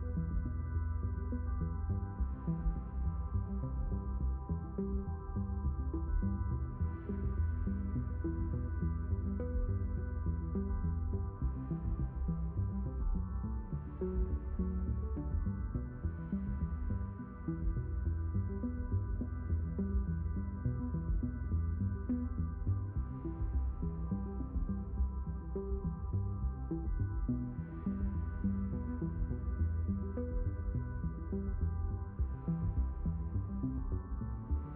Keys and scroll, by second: 2.7 shift+n, 3.5 s, 5.8 a, 6.4 shift+n, 7.4 s, 10.4 a, 15.1 s, 16.7 ctrl+z.